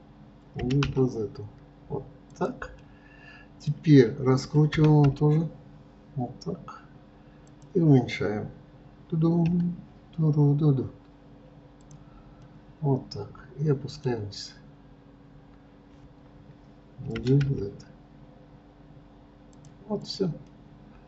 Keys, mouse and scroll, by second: 2.8-4.7 middle drag, 4.7 r, 12.4-15.4 middle drag, 17.2 g, 20.0 click, 20.5-21.0 middle drag.